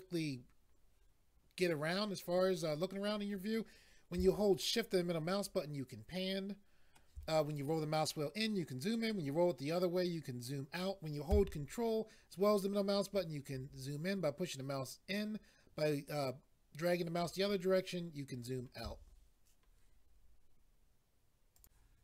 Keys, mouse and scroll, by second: 4.6 shift+middle click, 7.6-8.2 scroll up 1, 8.4-8.8 scroll up 1, 9.0-10.3 scroll down 2, 12.5 ctrl+middle click, 21.6 click.